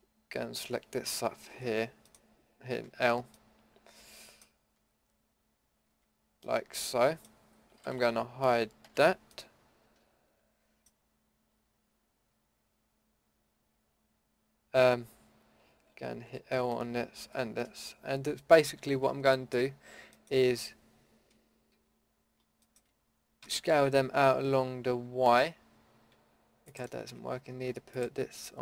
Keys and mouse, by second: 0.7 l, 1.5 l, 2.8 l, 4.8 l, 5.9 l, 8.8 h, 16.2 l, 17.2 l, 23.4 s, 27.0 ctrl+z.